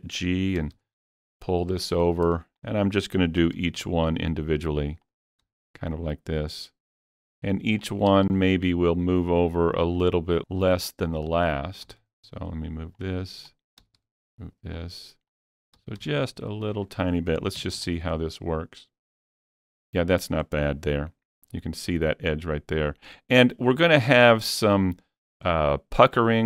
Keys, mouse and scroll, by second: 0.6 g, 0.8 g, 2.0 click, 2.6 click, 3.4 g, 3.6 g, 4.6 click, 5.1 click, 5.5 g, 5.6 g, 7.4 click, 7.9 click, 8.1 g, 8.3 g, 10.0 click, 10.4 click, 11.4 click, 11.9 g, 12.0 g, 13.0 click, 13.5 click, 13.8 g, 14.8 click, 15.3 click, 15.3 click, 15.8 g, 16.7 click, 17.6 Tab, 17.8-18.2 scroll down 2, 18.2-22.6 middle drag, 23.9 middle click, 23.9 scroll down 1, 24.1 Tab, 24.5-24.8 scroll up 1, 24.8-26.4 middle drag.